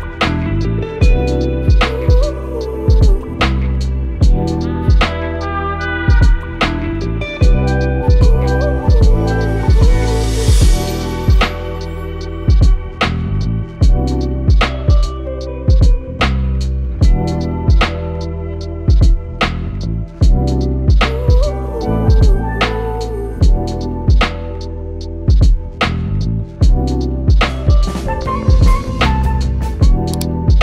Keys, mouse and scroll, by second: 3.1 click, 4.4 click, 4.8 Return, 6.9-8.9 drag, 8.4-9.1 typing, 12.2-12.9 typing, 25.5 click, 25.6-27.5 alt+drag.